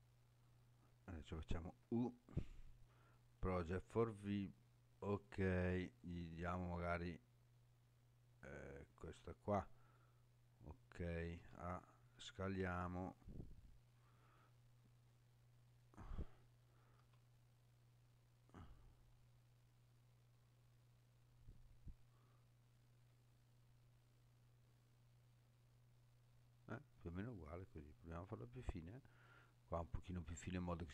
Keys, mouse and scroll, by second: 0.1-1.1 scroll up 1, 1.8 u, 5.9-9.0 drag, 12.0 s, 13.9 click, 14.5-16.0 scroll up 5, 17.0 s, 28.7 click, 29.4-29.8 scroll down 2.